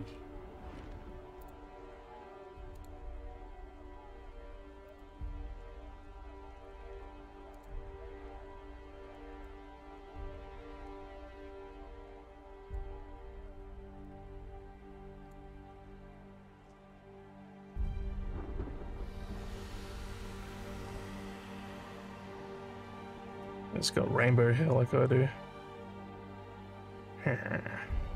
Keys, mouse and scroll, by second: 0.8 scroll down 2, 1.5 click, 2.7 click, 4.9 click, 7.6 click, 9.2 click, 10.9-12.8 drag, 14.1-15.3 drag, 17.4 scroll down 3.